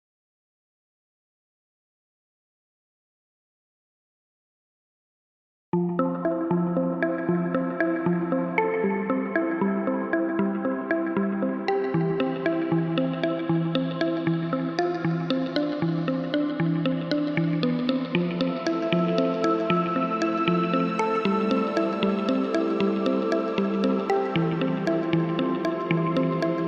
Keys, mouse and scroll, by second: 0.3-2.7 alt+drag, 7.3-9.1 drag, 13.2 click, 18.7-20.5 drag, 22.7 click, 23.7-24.3 drag, 25.0 ctrl+z.